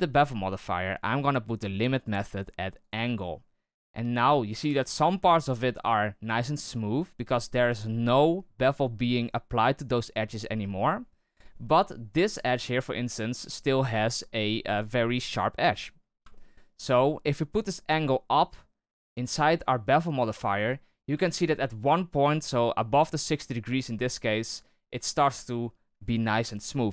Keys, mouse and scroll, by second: 1.9-15.8 drag, 15.8-16.3 scroll up 1, 16.3-18.5 shift+middle drag, 18.5-20.8 drag, 20.8-21.2 scroll down 4, 21.2-22.7 shift+middle drag, 22.7-26.9 drag.